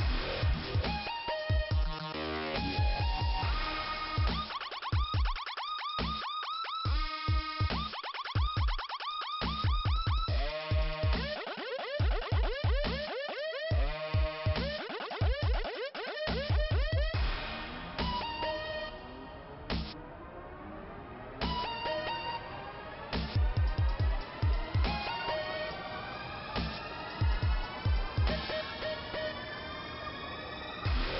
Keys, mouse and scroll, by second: 0.7 click, 1.8 click, 2.0 click, 3.1 click, 5.7 click, 9.2 click, 9.5 double click, 12.0 click, 13.2 click, 17.1 click, 18.6 click, 20.3 click, 20.7 middle click, 23.7-24.0 scroll up 1, 26.3 click, 28.0 click, 28.9 click, 30.5 click, 31.1 click.